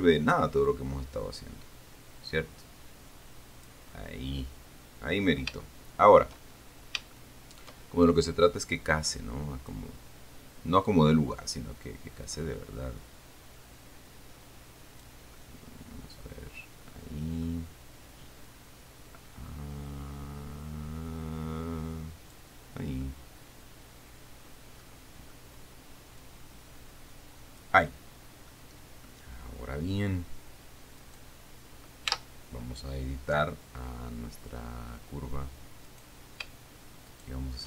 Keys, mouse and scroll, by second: 1.1-4.1 drag, 4.2 middle click, 4.8-5.4 scroll down 1, 5.4 scroll up 1, 5.9 shift+middle click, 8.0 shift+middle click, 8.7-10.2 drag, 11.2-15.5 drag, 15.7-17.8 middle drag, 18.7-22.8 drag, 23.3-25.7 middle drag, 26.6-28.1 drag, 29.1 middle click, 31.3 right click, 32.5 Tab, 36.1 right click, 37.4 shift+right click.